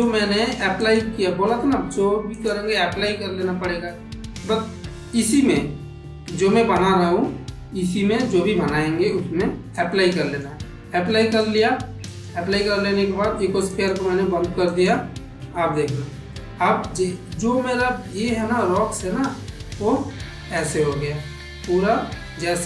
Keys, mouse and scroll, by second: 0.7 click, 2.2-10.3 drag, 11.3 click, 11.9 click, 13.6 click, 14.5 click, 15.4 Tab, 16.2-18.0 middle drag, 18.4-20.5 middle drag, 21.6 middle click.